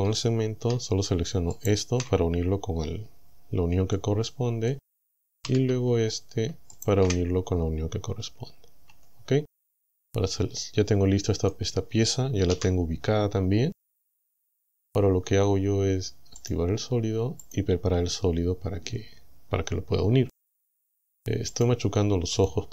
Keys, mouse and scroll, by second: 1.6 alt+shift+right click, 3.9 middle click, 5.5 a, 6.8 alt+shift+right click, 8.9 Tab, 9.8-11.7 middle drag, 12.5 KP_1, 13.9 scroll down 2, 16.4 click, 17.5 click, 21.6 click, 22.4 click.